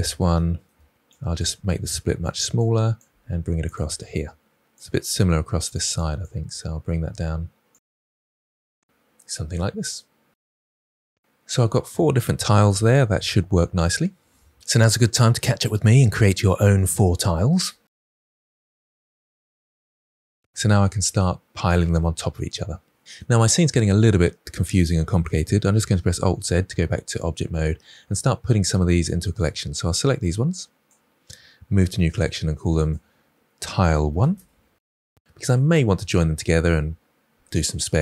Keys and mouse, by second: 0.3 click, 0.4 g, 0.7 click, 1.1 g, 1.3 click, 1.4 Tab, 2.1 Tab, 2.5 click, 3.3 g, 3.7 click, 4.1 g, 4.3 click, 5.2 click, 5.4 g, 5.7 click, 6.0 g, 6.5 click, 6.7 Tab, 7.3 Tab, 7.7 g, 8.0 click, 8.3 click, 8.4 g, 8.6 click, 8.8 Tab, 10.9 shift+middle drag, 25.8 alt+z, 31.7 m.